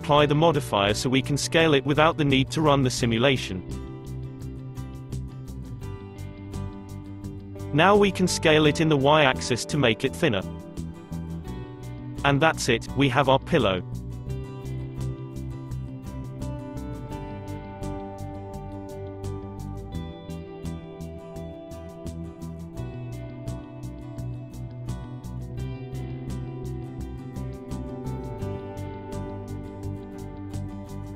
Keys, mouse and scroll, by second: 0.1 click, 1.2-2.3 middle drag, 2.3 s, 2.4 s, 7.7-9.0 middle drag, 9.0 s, 11.9-14.8 middle drag, 15.7 click, 26.3 click, 28.1 middle click, 28.7 click.